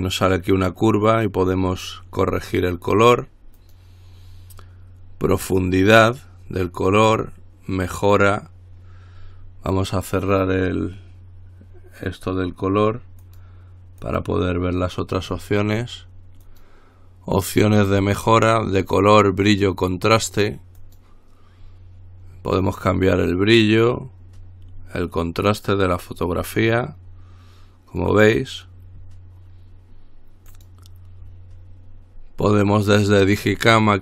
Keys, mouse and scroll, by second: 3.8 click, 5.7 click, 13.4 click, 14.2 click, 16.7 click, 21.0 click, 23.8-28.7 drag, 30.7 click, 32.7 click.